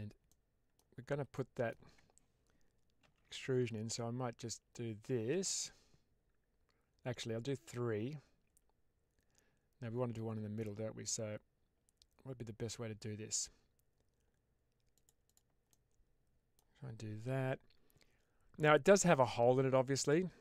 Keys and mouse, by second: 0.2 middle click, 1.2 middle click, 2.9 ctrl+r, 15.1 click, 15.6 middle click.